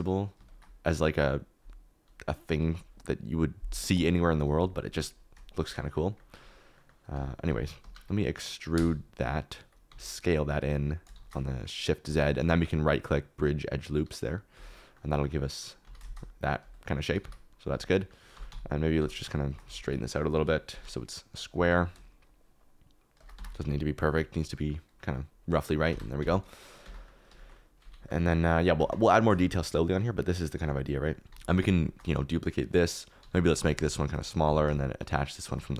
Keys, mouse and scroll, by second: 7.1 s, 7.8 Escape, 8.7 e, 9.3 click, 9.8 s, 11.1 shift+z, 15.8 s, 16.0 shift+z, 17.0 s, 17.2 y, 17.7 click, 17.9 middle click, 18.3-20.3 typing, 19.6 alt+z, 21.3 click, 21.5 g, 21.6 y, 23.3 Tab, 23.5 alt+z, 24.6 middle click, 24.9 middle click, 25.6 middle click, 25.8 Tab, 26.2 Tab, 26.8 Tab, 27.7 middle click, 28.7 Tab, 29.4 middle click, 31.0 click, 31.2 alt+KP_7, 31.3 alt+d, 31.9 shift+middle click, 33.2 s, 33.5 g, 33.7 shift+middle click, 34.4 g, 35.1 shift+middle click.